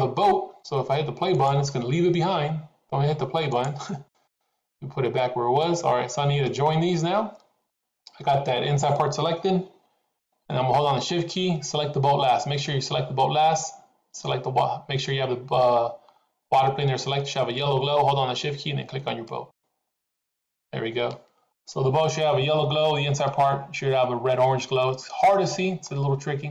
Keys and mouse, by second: 1.2 click, 3.6 click, 4.1 click, 6.6-7.8 middle drag, 10.2 middle click, 19.3 shift+click, 21.6 middle click, 23.3-25.8 middle drag.